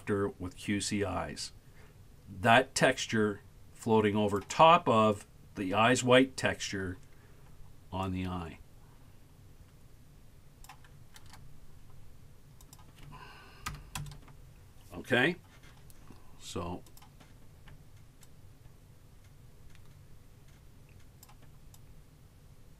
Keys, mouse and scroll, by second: 8.1-10.8 shift+drag, 12.6-15.6 drag, 16.9 click, 18.3-21.4 shift+drag, 21.8-22.7 shift+drag.